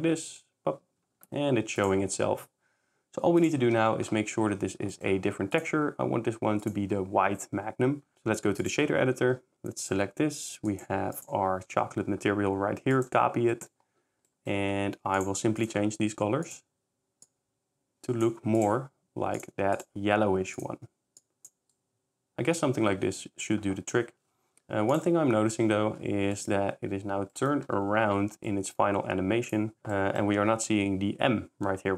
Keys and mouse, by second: 1.8 shift+click, 3.6-4.0 shift+drag, 6.7-8.7 drag, 10.1-11.5 drag, 13.0 click, 15.2 click, 15.6 click, 18.6-22.3 drag, 22.3 ctrl+s, 24.9 click, 26.0 s, 26.5 middle click, 26.5 s, 28.5 shift+drag, 29.8 1, 29.8 8, 29.8 0.